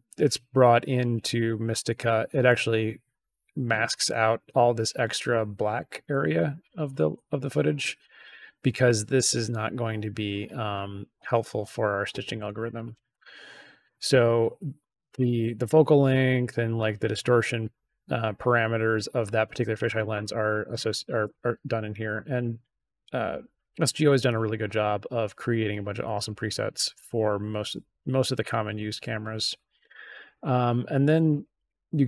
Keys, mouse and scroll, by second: 6.7 scroll down 1, 7.1 middle click, 7.6 middle click, 8.0 middle click, 23.2-25.5 drag, 27.6 click, 31.2 click.